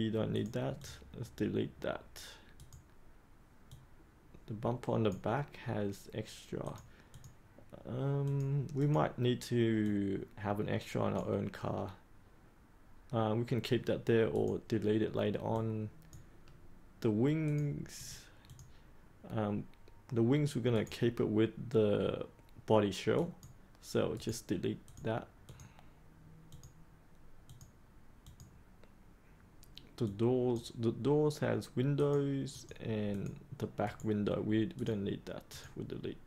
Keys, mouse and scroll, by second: 0.3-15.3 drag, 20.7 right click, 23.1 click, 24.1 right click, 24.8-33.1 drag, 33.8 right click, 34.7 click.